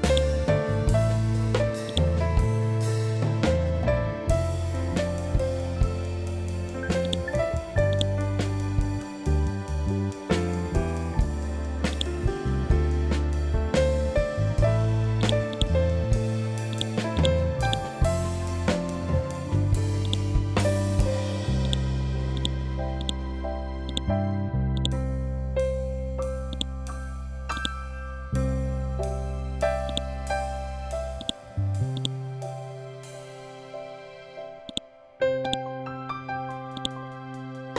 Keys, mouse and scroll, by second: 5.0 scroll up 1, 6.5-13.4 drag, 13.4-13.8 scroll down 1, 14.7-19.5 drag, 23.3-30.7 ctrl+drag, 32.0-32.3 scroll up 1, 34.2-37.7 ctrl+drag.